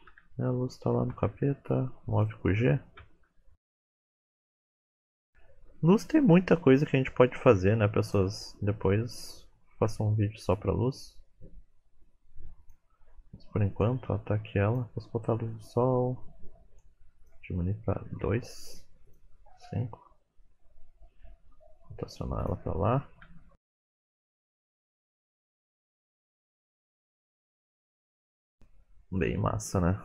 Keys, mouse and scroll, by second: 0.1 t, 1.1 g, 3.0 KP_1, 3.5 KP_Enter, 4.6 middle click, 4.8-5.1 scroll up 9, 5.2 middle click, 6.1 g, 6.9 middle click, 7.5 g, 8.3 middle click, 9.2-9.9 scroll down 4, 9.9 r, 11.2 middle click, 12.3 g, 13.7-21.3 click, 21.3 r, 22.7 middle click, 23.2 r, 23.9 middle click, 24.1 r, 24.4 middle click, 24.5-25.1 scroll up 8, 24.8 middle click, 25.1 r, 26.3 F12, 28.8-29.9 scroll down 3, 29.2 middle click.